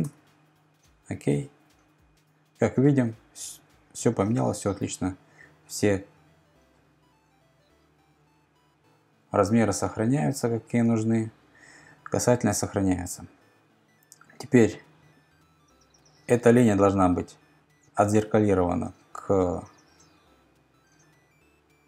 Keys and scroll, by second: 0.0-0.2 typing.